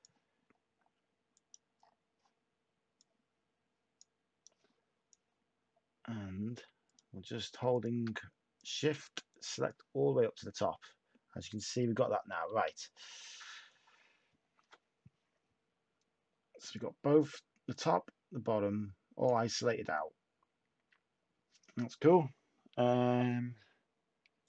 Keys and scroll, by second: 12.4 a.